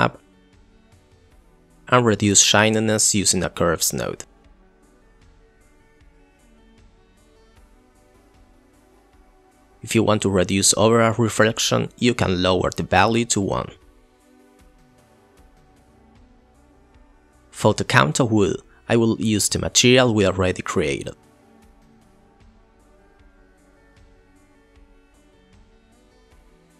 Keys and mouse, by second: 0.3-0.7 drag, 1.2 click, 2.6 click, 3.1 shift+a, 4.1 click, 4.8 click, 5.3 click, 5.9 click, 9.1-10.4 drag, 12.7 click, 14.1 middle click, 16.8 click, 17.1 click, 19.3 click, 20.9 click, 22.2 click, 23.2 click, 23.9 click, 24.2-24.9 drag, 25.0 middle click, 25.2 KP_Divide, 25.4 click, 26.0 shift+click.